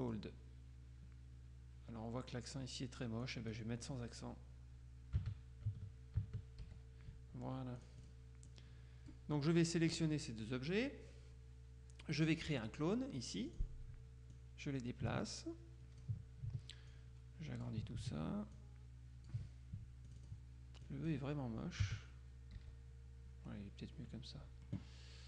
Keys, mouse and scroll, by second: 3.3 click, 5.3 Caps_Lock, 6.3 Caps_Lock, 6.7 e, 7.9 click, 13.6 click, 14.5-16.6 drag, 17.0 click, 18.7 click, 20.2-21.7 drag, 21.9 Caps_Lock, 22.7 e.